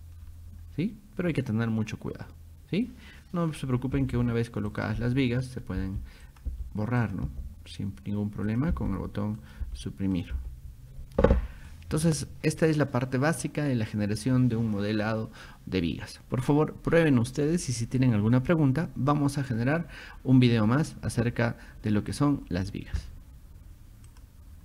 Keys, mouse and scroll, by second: 0.2 middle click, 0.2 scroll down 2, 4.7 click, 6.3 click, 7.0 click, 8.5 click, 9.4 click, 10.2 click, 11.2 middle click, 24.1 click.